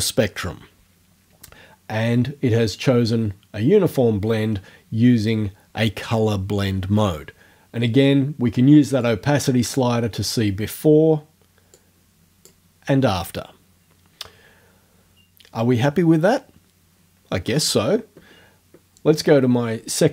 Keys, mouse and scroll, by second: 9.0 click, 11.8 click.